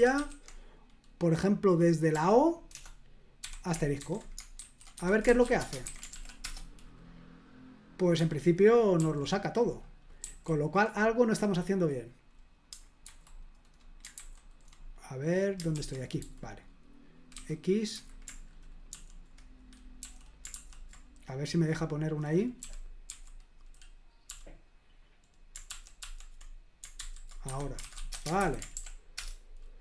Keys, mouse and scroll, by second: 2.1 typing, 3.4-5.9 typing, 5.0 Escape, 6.1 ctrl+p, 6.4 Return, 9.0 super+l, 10.2 super+l, 13.0 super+h, 14.2 super+h, 15.7 super+l, 16.2 h, 17.3-17.9 typing, 20.0 typing, 22.6-23.1 typing, 27.0-28.3 typing, 27.4 Escape, 28.4 super+h, 28.7 ctrl+p, 29.2 Return.